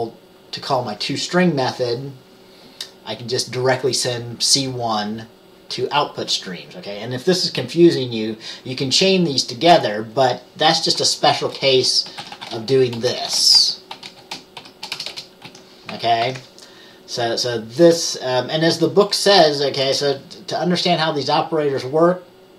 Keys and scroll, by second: 11.5 Return, 14.0-15.6 typing, 16.3 ctrl+s, 19.9 Return.